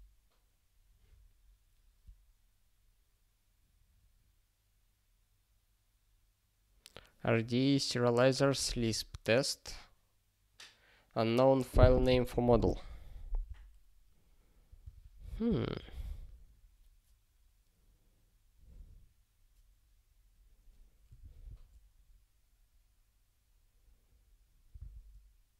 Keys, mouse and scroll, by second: 14.9 super+o, 15.6 ctrl+s.